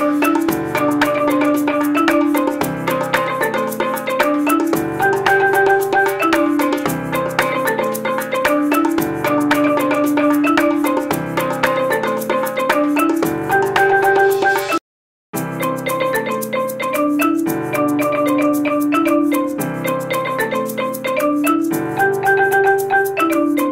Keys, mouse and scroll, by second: 22.4 z.